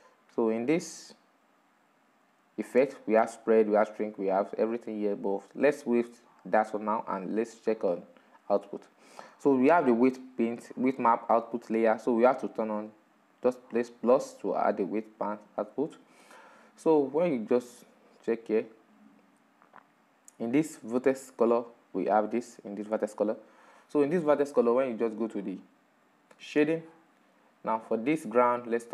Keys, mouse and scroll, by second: 0.0-1.7 middle drag, 1.7 click, 2.4-5.4 drag, 5.4-7.2 scroll down 5, 7.7-10.5 drag, 10.5-12.5 scroll down 4, 15.9-18.9 drag, 20.8 click, 24.0-27.0 drag.